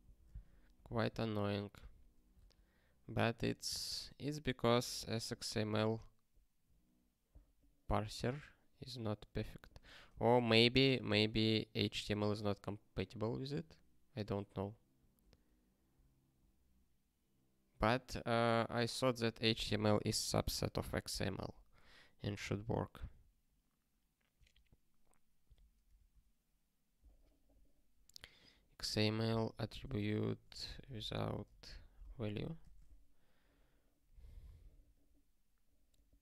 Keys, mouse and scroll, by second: 0.4 ctrl+p, 0.8 ctrl+p.